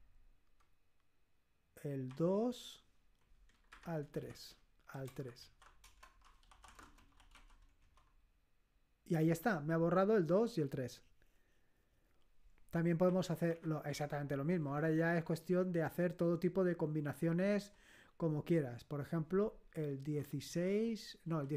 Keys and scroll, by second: 2.1 2, 3.4-7.8 typing, 5.8 Return, 13.0 Up, 13.4 Up, 13.9 Left, 14.4 Left, 14.8 Left, 15.8 Left, 17.6 Left, 19.7-20.0 typing, 20.6 Delete, 21.2 Left.